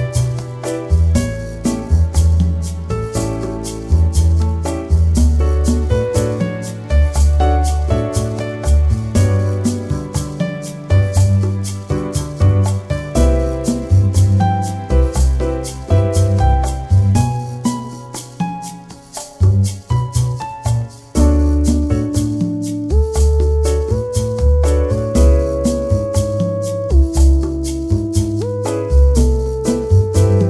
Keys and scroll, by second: 26.0 shift+c, 26.5 shift+o, 27.6 shift+r, 28.0 shift+o, 28.5 shift+n, 29.1 shift+a.